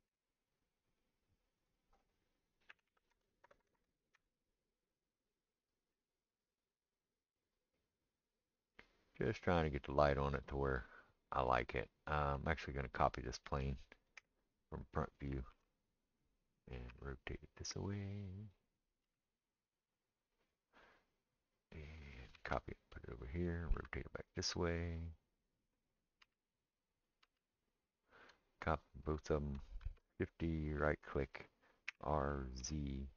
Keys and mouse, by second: 3.4 KP_0, 3.8 KP_0, 14.2 KP_1, 15.5 shift+d, 16.3-28.7 middle drag, 16.9 r, 19.0 g, 22.3 shift+d, 23.7 r, 26.2 g, 27.2 g, 28.7 shift+click, 28.8-33.1 shift+middle drag, 29.8 shift+d, 31.9 r.